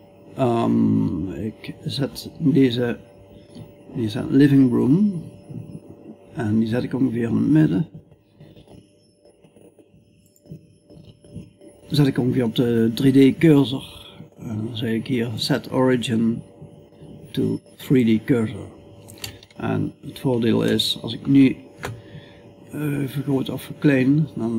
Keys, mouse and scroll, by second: 5.8 middle click, 6.5 middle click, 20.1 middle click, 22.1 s.